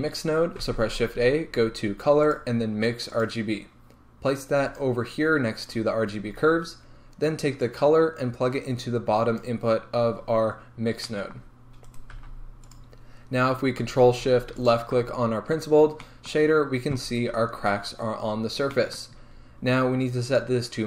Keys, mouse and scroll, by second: 4.7 middle click, 7.7 click, 11.9 right click, 12.3 g, 14.6 ctrl+shift+click, 16.4-20.8 middle drag, 17.1 scroll up 2.